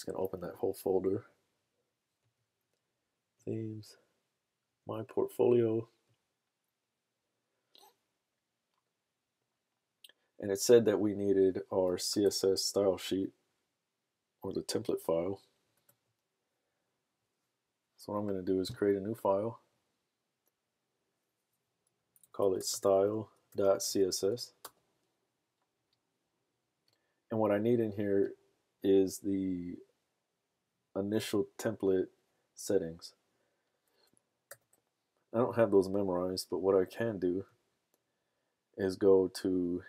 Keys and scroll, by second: 22.1-24.6 typing, 34.5 super+s.